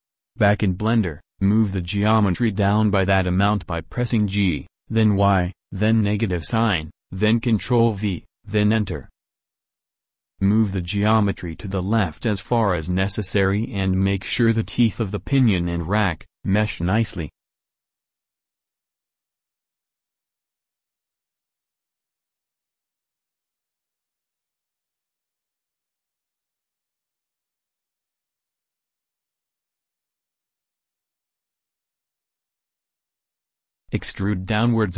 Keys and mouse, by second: 0.0 alt+Tab, 1.0 g, 10.9-13.9 middle drag, 13.9 g, 18.3-22.3 drag, 21.3 z, 22.3 g, 27.5 click, 27.7 middle click, 28.5 z, 34.5 e.